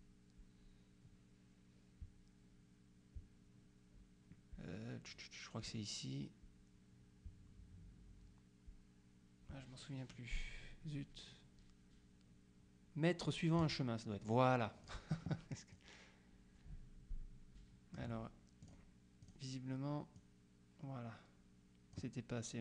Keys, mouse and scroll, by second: 13.7 click, 14.9 click, 15.8-18.5 drag, 18.7 click, 20.3-22.5 drag.